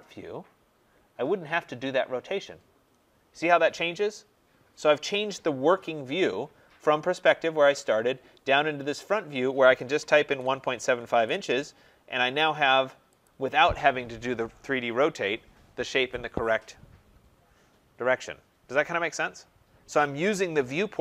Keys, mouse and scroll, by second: 0.9-1.7 scroll, 4.8-5.7 scroll, 5.7 scroll, 9.4-11.0 typing, 11.1 Return, 13.2 click, 15.3-18.3 drag.